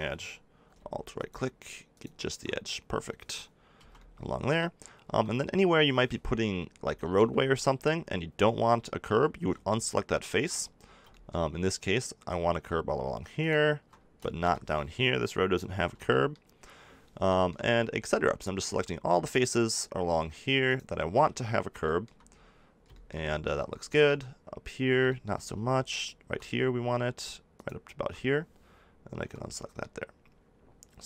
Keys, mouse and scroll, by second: 3.5-5.0 drag, 3.7 b, 5.0 b, 5.8-7.0 drag, 7.1 middle click, 8.6-11.1 middle drag, 11.2 middle click, 13.9-15.8 middle drag, 15.7 b, 17.6 middle click, 21.5 click, 21.8 middle click, 25.1 middle click, 29.1 b.